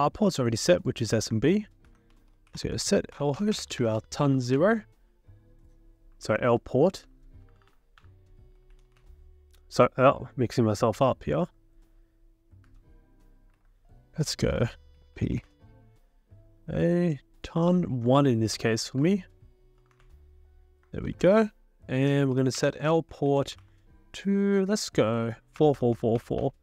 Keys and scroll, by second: 1.9 ctrl+l, 1.9-4.8 typing, 6.1 Up, 6.6 ctrl+Left, 7.4 BackSpace, 7.7 BackSpace, 8.7 BackSpace, 12.7 Up, 13.6 ctrl+c, 14.7-15.9 typing, 18.6 Up, 19.0 Up, 19.8 BackSpace, 19.9 1, 20.0 Return, 21.1 ctrl+l, 21.9-24.0 typing, 25.6-26.1 typing, 26.4 Return.